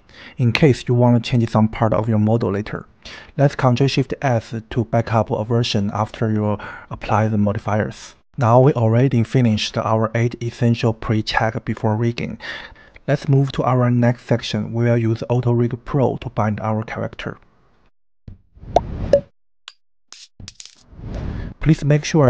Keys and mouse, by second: 0.7 ctrl+shift+s, 22.2 Tab.